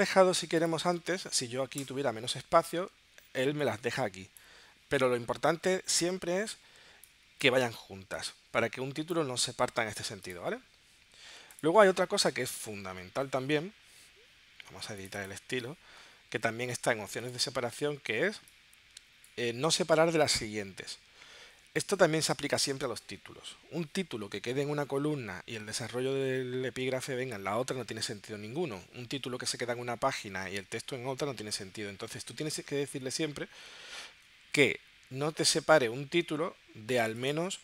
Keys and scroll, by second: 1.8 BackSpace.